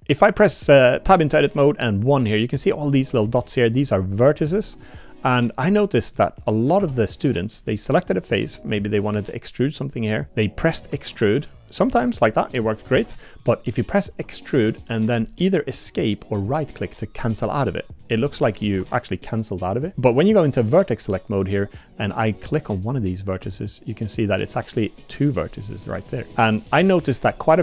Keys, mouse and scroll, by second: 0.0 1, 2.6 click, 3.2 click, 4.1 click, 4.6 middle click, 6.0 middle click, 6.8 3, 7.5 click, 10.9 e, 12.2 middle click, 12.9 ctrl+z, 13.2 click, 14.1 e, 18.0 click, 18.8 Tab, 19.9 1, 22.8 click, 23.4 g, 26.3 click.